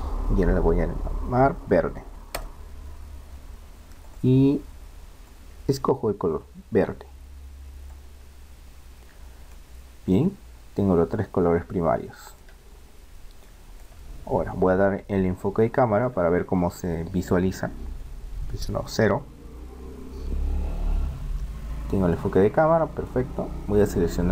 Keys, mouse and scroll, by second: 4.0-5.8 drag, 9.5-10.5 middle drag, 10.8 middle click, 11.2 middle click, 12.8-17.2 middle drag, 19.4 KP_0, 23.8-24.3 right drag.